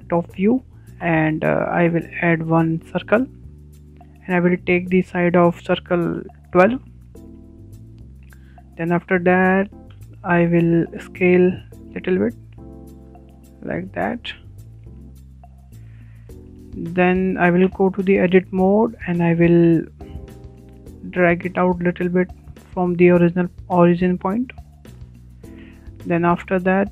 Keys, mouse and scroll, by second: 0.3-0.9 shift+middle drag, 0.7 `, 0.9 `, 2.3 shift+middle drag, 2.6-3.0 scroll up 5, 3.0 shift+middle click, 3.6 shift+a, 3.7 shift+a, 6.8-10.7 drag, 8.2 KP_1, 8.5 KP_2, 8.9 Return, 11.6 a, 11.8 a, 12.7 s, 12.9 s, 14.8 scroll up 7, 15.4-15.9 shift+middle drag, 15.9 shift+a, 15.9 shift+a, 16.7 shift+a, 17.9 scroll up 3, 18.2-19.7 shift+middle drag, 19.4 Tab, 19.7 Tab, 20.1-21.6 shift+middle drag, 21.4 w, 21.6 w, 22.3 click, 26.6 shift+middle click.